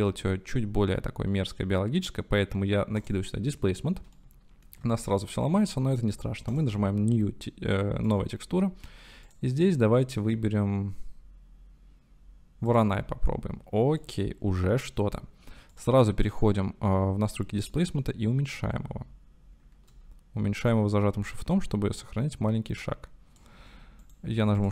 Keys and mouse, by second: 4.2 shift+drag, 4.4-4.7 shift+middle drag, 6.5-12.8 middle drag, 14.0-14.7 middle drag, 14.7 click, 14.7-17.7 middle drag, 17.7-19.9 drag, 20.8-22.1 shift+drag, 22.6 shift+click, 23.7 middle click, 24.0 click.